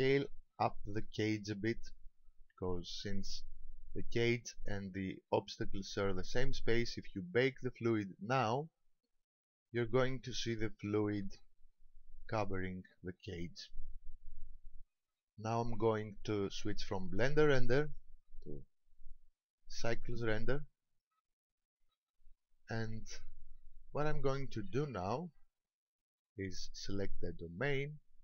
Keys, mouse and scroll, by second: 0.2 right click, 17.8 click, 27.4 right click.